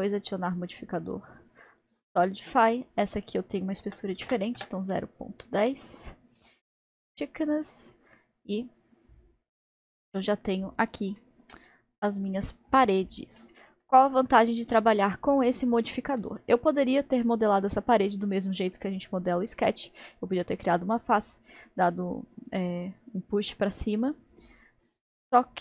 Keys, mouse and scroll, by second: 6.4 click, 9.5 click, 10.1 middle click, 10.7-14.4 middle drag, 14.4-16.2 scroll up 2, 16.2-19.3 middle drag, 25.4-25.6 middle drag.